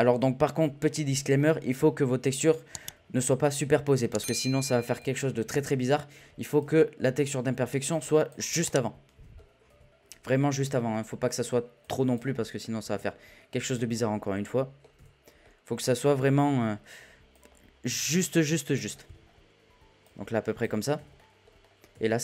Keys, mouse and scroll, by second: 0.1 z, 0.4-1.3 scroll up 1, 1.3 shift+middle drag, 1.6-2.3 scroll up 1, 2.3 click, 3.1 click, 6.6 click, 8.6-9.7 middle drag, 9.7 z, 10.0-10.4 scroll up 2, 10.4 shift+middle drag, 10.6 scroll down 2, 10.7 scroll up 1, 10.9-11.2 scroll down 8, 11.2-11.8 middle drag, 11.8 click, 12.3-12.9 middle drag, 12.9 z, 13.8-14.9 middle drag, 14.9 z, 15.2-16.1 middle drag, 16.1 KP_7, 16.6 z, 17.3 click, 18.9-19.4 scroll down 1, 19.4-20.0 scroll down 1, 20.0 click, 21.1 z, 21.2-21.6 middle drag, 21.6-21.9 scroll down 5, 21.9 z.